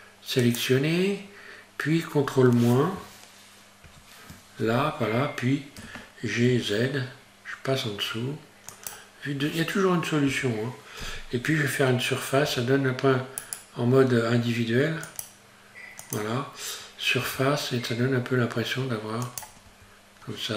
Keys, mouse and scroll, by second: 3.9 ctrl+n, 5.8 g, 12.5 s, 15.1 click, 17.2 s, 19.7 Tab, 20.2-20.5 scroll down 1.